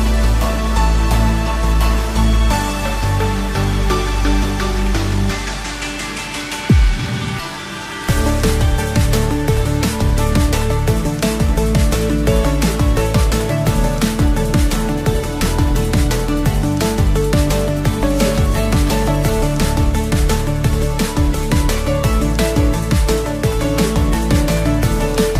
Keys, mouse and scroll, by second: 3.0 click, 3.9 click, 4.6 shift+click, 5.4 ctrl+j, 6.9-7.4 scroll down 2, 7.4-8.1 middle drag, 9.2-10.9 drag, 11.8 Tab, 12.7 a, 14.0 alt+n, 17.4 Tab, 19.1-20.7 drag, 20.9-22.0 middle drag, 23.0 click.